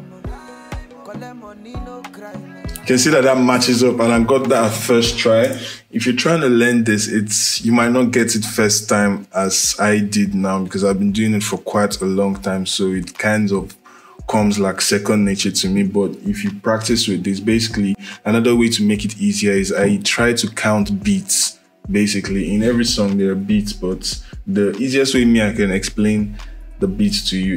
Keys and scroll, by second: 5.2 space.